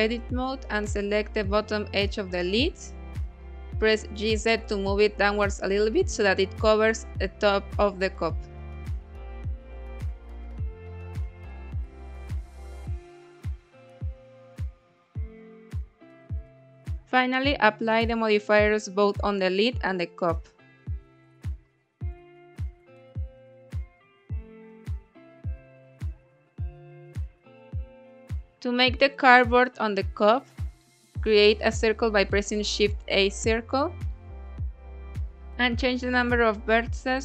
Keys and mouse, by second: 1.5 2, 2.0 click, 2.8 g, 3.0 z, 4.7 click, 5.3 KP_1, 6.2 Tab, 6.9-8.3 drag, 8.9 KP_1, 9.5 g, 9.7 z, 11.2 click, 11.5-12.1 middle drag, 12.6-13.9 middle drag, 14.6-15.8 middle drag, 16.1 click, 17.9 click, 19.5 click, 23.2-23.9 drag, 24.5 click, 26.4 middle drag, 29.4-30.0 middle drag, 30.3 shift+a, 34.6 click, 35.6-37.2 drag.